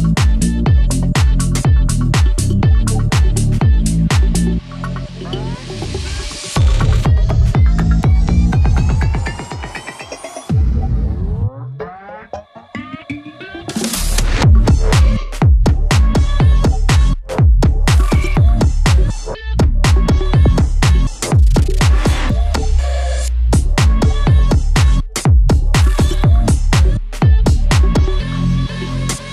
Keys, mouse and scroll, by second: 2.1 scroll up 1, 2.3 click, 4.2 click, 6.2 ctrl+z, 6.7 click, 7.5 ctrl+z, 7.8 click, 8.3 ctrl+z, 8.6 click, 9.7 ctrl+z, 10.6 click, 12.5-13.4 scroll down 1, 14.7 scroll up 1, 15.4 click, 16.0 ctrl+click, 16.3 scroll down 1, 16.9 click, 21.5 scroll down 1, 21.9 scroll up 1, 23.2 click, 25.3 click, 27.4 click.